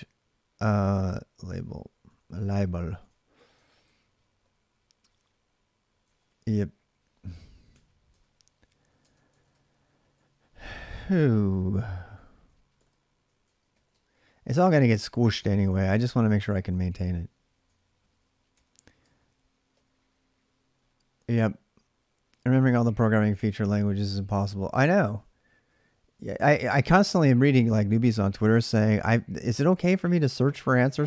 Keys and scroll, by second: 0.5-3.9 typing, 5.8-7.5 typing, 7.9 Return, 8.8 Tab, 9.1 ctrl+[, 9.3-10.3 l, 10.5 l, 11.7-17.2 typing, 17.8 ctrl+a, 18.3-19.5 typing, 19.5 Return.